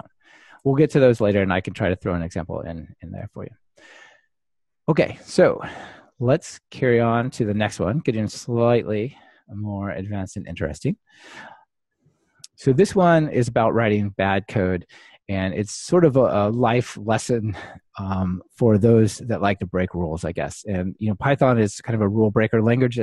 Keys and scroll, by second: 3.8 alt+super+l, 5.7 alt+super+l, 12.2 ctrl+shift+r.